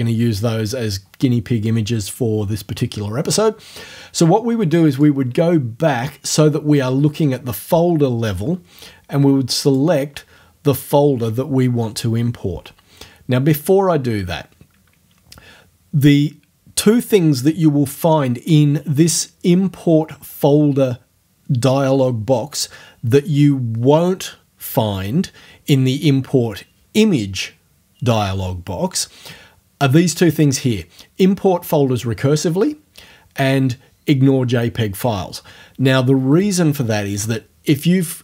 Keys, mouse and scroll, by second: 5.0 click, 9.7 click.